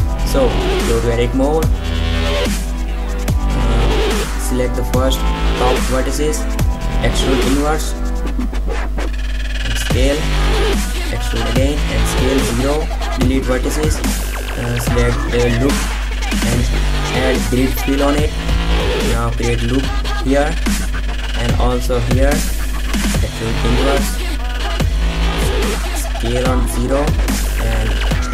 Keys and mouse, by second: 4.4 e, 5.2 s, 8.6 e, 9.8 s, 11.8 x, 11.8 x, 13.4 space, 15.8 middle click, 16.6 ctrl+r, 18.8-20.0 middle drag, 20.1 ctrl+r, 24.3 e, 24.5 s, 26.0 s, 26.6 s, 27.0 middle click, 27.5 ctrl+z, 27.8 e, 28.1 s.